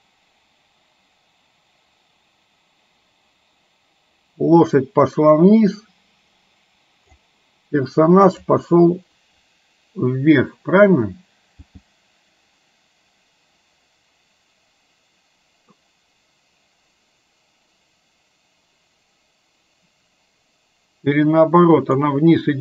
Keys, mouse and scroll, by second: 8.5 click, 11.6 g.